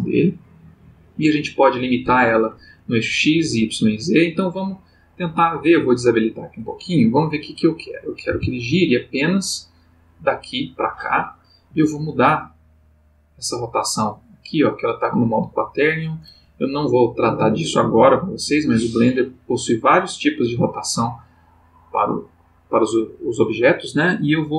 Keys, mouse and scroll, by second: 6.0 click, 8.3 r, 11.7 Escape, 19.0 click, 22.9 click.